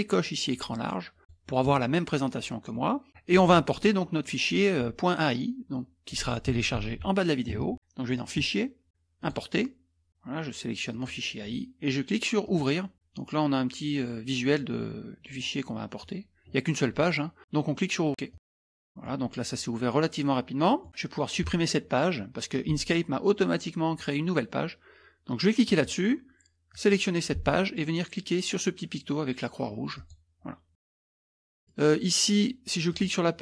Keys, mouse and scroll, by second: 1.2 click, 3.3 click, 3.8 scroll up 1, 4.1 middle click, 8.2 click, 9.2 click, 10.9 click, 12.4 click, 18.3 click, 18.5 middle click, 20.2 middle click, 25.6 click, 26.7 click, 29.9 click, 31.1 middle click, 32.9 click.